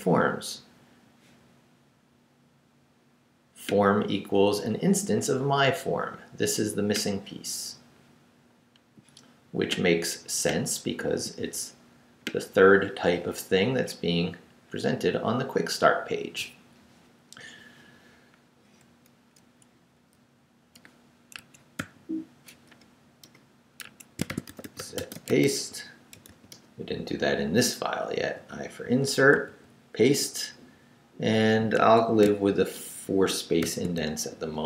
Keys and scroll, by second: 19.7 Left, 21.4 Escape, 21.8 o, 22.7 BackSpace, 23.2 Return, 23.8 Escape, 24.0-26.8 typing, 28.2 i, 28.8 super+i, 29.3 super+v, 31.8 Escape, 33.6 shift+;, 34.3 shift+w.